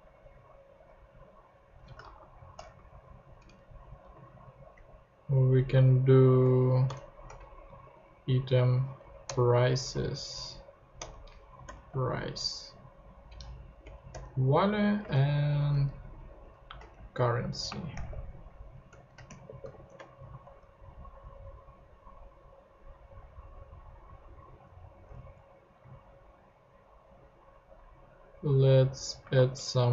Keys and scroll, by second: 2.0 shift+Right, 2.6 shift+BackSpace, 3.2 alt+shift+BackSpace, 3.3 alt+Right, 6.9 alt+shift+Right, 7.8 alt+shift+p, 8.3 p, 9.0 Down, 9.2 Return, 9.7 •, 11.0 Return, 11.6 •, 13.8 Down, 14.1 Return, 14.7 Right, 16.8 alt+shift+super+Left, 16.9 shift+super+c, 17.4 super+Right, 17.7 space, 18.0 super+v, 18.6 super+Left, 19.2-20.1 typing, 20.4 super+Tab, 25.1 super+Tab, 29.2 space, 29.3 m.